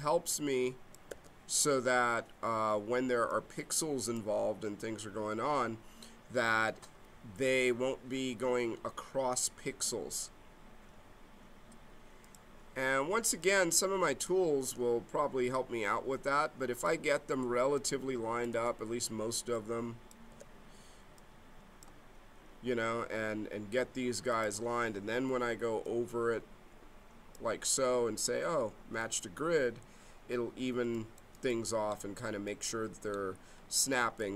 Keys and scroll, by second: 1.1 g, 14.6 g, 17.1 g, 18.5 g, 21.2 g.